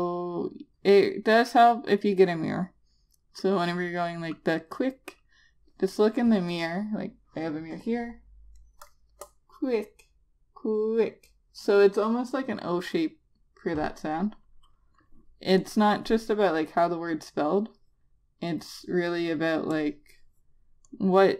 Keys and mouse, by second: 16.1 click, 20.2 click.